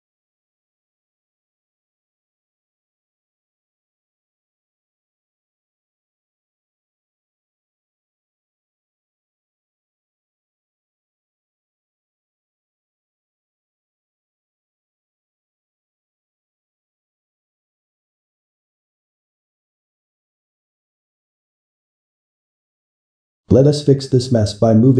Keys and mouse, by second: 0.8 click, 2.4 x, 3.4 3, 4.0-5.8 shift+middle drag, 5.8 z, 6.2-7.8 ctrl+middle drag, 7.8 Tab, 8.2-12.5 shift+middle drag, 12.5 click, 16.3 click, 16.9-20.8 middle drag, 20.8 `, 21.7-22.8 ctrl+middle drag, 22.8 Tab, 23.5 ctrl+middle click, 24.4 click.